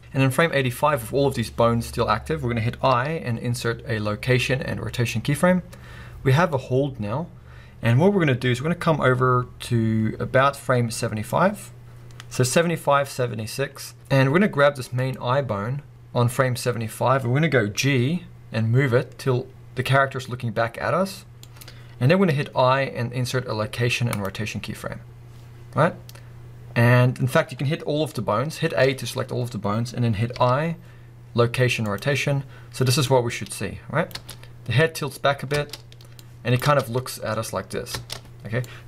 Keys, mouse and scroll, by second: 2.8 i, 17.8 g, 21.4 click, 28.8 a, 33.1-37.9 drag, 34.1 space, 35.6 space, 36.6 space, 37.9 space, 38.6 click.